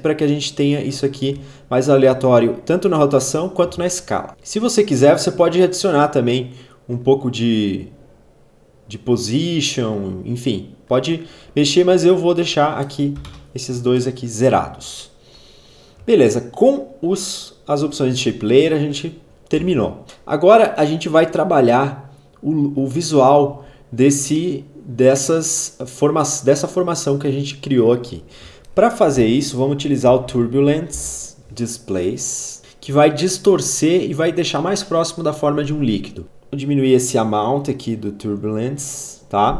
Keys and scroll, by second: 13.2 0, 13.3 Return, 19.6 space, 28.8-30.8 typing.